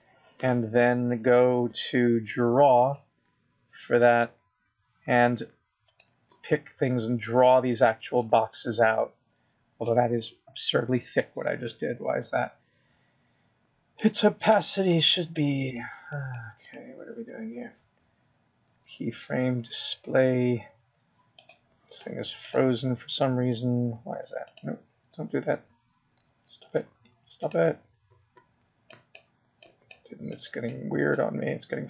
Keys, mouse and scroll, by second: 0.2 BackSpace, 0.3 BackSpace, 5.2 click, 10.4 click, 10.6 click.